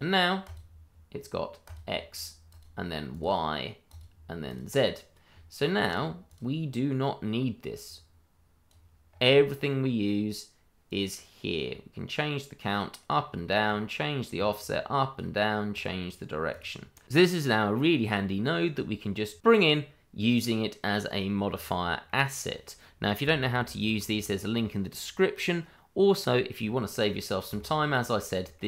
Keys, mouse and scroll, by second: 5.3 scroll down 1, 5.8 click, 6.3 double click, 7.8 click, 9.1 scroll up 1, 9.3 middle click, 10.8 click, 17.6 double click, 18.1 scroll down 1, 18.4 middle click, 18.8 shift+middle click, 19.1-19.5 shift+scroll up 1, 19.5 shift+middle click, 19.6 middle click, 21.9-22.3 scroll down 1, 22.3 middle click, 23.2-23.5 scroll up 1, 23.6 shift+middle click, 24.1-26.1 scroll up 1, 26.6 middle click, 27.5 shift+middle click, 27.6 middle click, 27.7 shift+middle click, 28.5 middle click.